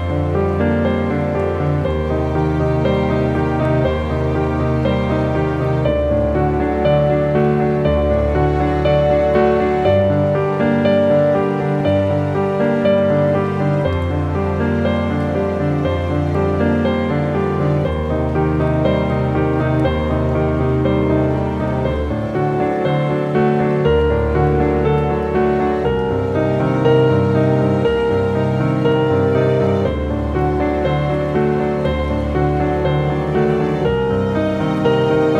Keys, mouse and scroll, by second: 3.0 scroll up 1, 5.6 alt+click, 11.0-11.5 scroll down 2, 14.7 scroll down 1, 14.8 ctrl+j, 16.3 click, 17.0 scroll up 1, 18.8 typing, 19.0 click, 25.8 click, 28.8-30.7 drag, 35.3 click.